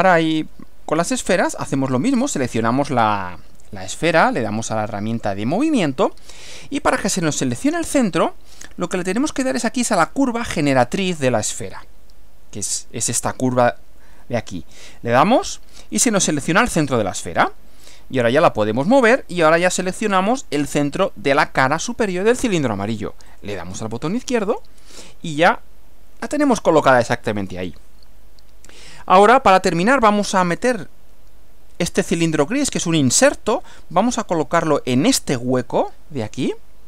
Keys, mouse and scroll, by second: 2.4 click, 5.1 click, 16.9 click, 23.4 click, 24.5 click, 27.7-30.8 middle drag, 36.4-36.8 middle drag.